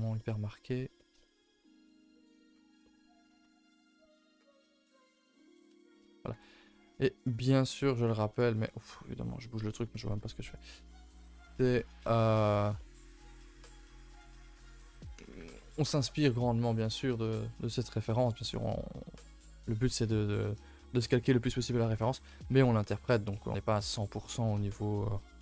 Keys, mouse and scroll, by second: 0.3 scroll up 2, 0.6 middle click, 1.4-1.7 scroll up 2, 1.7 middle click, 2.0 g, 2.8 middle click, 3.4 click, 3.6 middle click, 4.3 alt+click, 4.5 middle click, 5.0 g, 5.7 shift+middle click, 6.3 r, 7.1 alt+click, 7.4 middle click, 7.9 g, 8.5-9.6 middle drag, 9.6 alt+click, 10.0 g, 10.7 middle click, 11.0 a, 11.0-11.6 scroll down 3, 11.1 a, 11.6 middle click, 12.0 ctrl+s, 12.3 scroll down 1, 12.5-14.6 shift+middle drag, 14.6 1, 14.7 middle click, 15.1 a, 15.2 a, 15.5 ctrl+s, 15.6 middle click, 16.2-16.6 scroll down 2, 17.9-20.5 middle drag, 20.5-20.9 scroll down 1, 20.9 shift+middle click, 21.2 scroll up 1, 21.4 a, 21.6 a, 22.2 ctrl+s, 23.3 middle click, 23.8-24.1 scroll up 3, 24.1 middle click, 25.1 scroll up 1, 25.2 middle click.